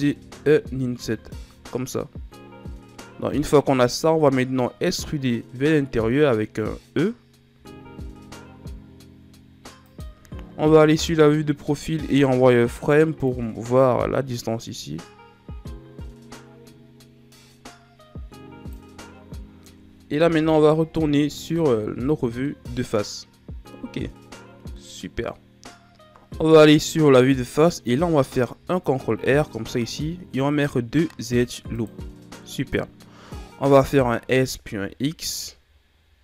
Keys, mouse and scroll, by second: 0.9 ctrl+z, 2.3-5.3 middle drag, 7.4 e, 10.6 KP_3, 12.1 z, 13.2 click, 20.2 KP_1, 21.0 z, 22.4-25.4 middle drag, 26.1 KP_1, 28.5 ctrl+r, 33.7 s.